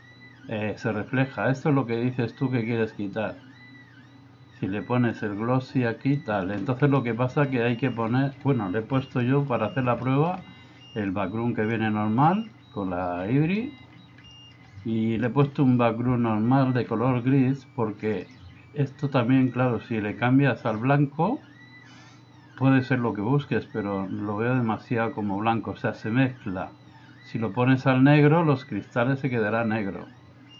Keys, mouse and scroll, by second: 5.3-6.2 drag, 7.1 shift+middle click, 9.2 middle click, 10.2 middle click, 11.2 click, 13.7 middle click, 14.4 shift+middle click, 15.4 middle click.